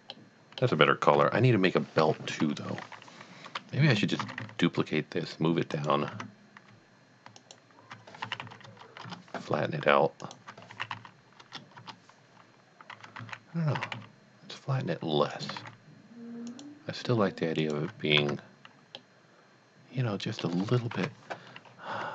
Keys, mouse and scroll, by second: 0.2 middle click, 1.2 KP_1, 3.9 KP_1, 4.2 shift+d, 4.5 z, 5.8 click, 6.2 Tab, 7.4 alt+click, 8.3 s, 8.6 z, 8.8 KP_0, 9.1 KP_Enter, 10.2 alt+click, 10.8 s, 10.9 z, 11.4 KP_0, 11.9 KP_Enter, 13.2 ctrl+z, 13.8 s, 14.2 z, 15.3 click, 15.6 z, 16.5 click, 17.6 alt+click, 18.2 Tab, 19.0-20.9 middle drag, 20.9 KP_1, 21.7 scroll up 1, 21.9 Tab.